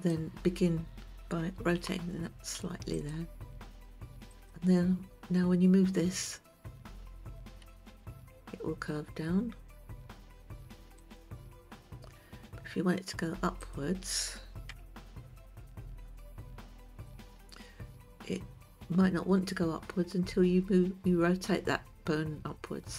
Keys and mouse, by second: 0.4 click, 2.3 r, 4.8 click, 8.1 g, 15.7 alt+r, 17.7 click.